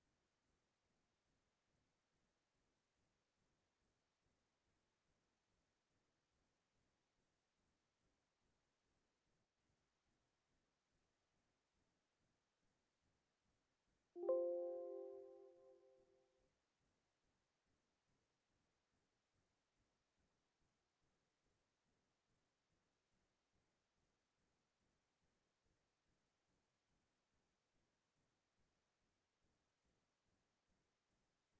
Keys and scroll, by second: 20.3 ctrl+z, 25.8 KP_4.